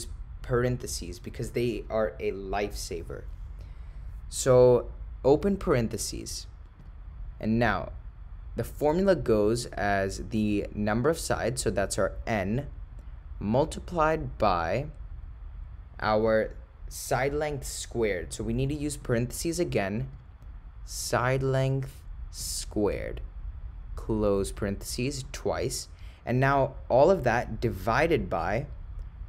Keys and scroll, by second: 5.3 (, 14.5 *, 19.1 (, 24.4 ), 25.3 ), 27.7 /.